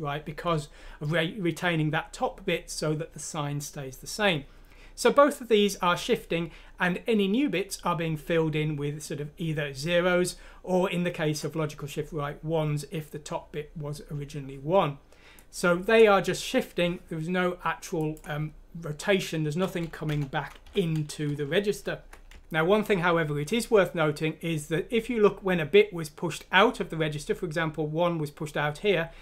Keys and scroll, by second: 20.1 Home, 20.6 ;, 22.0 typing.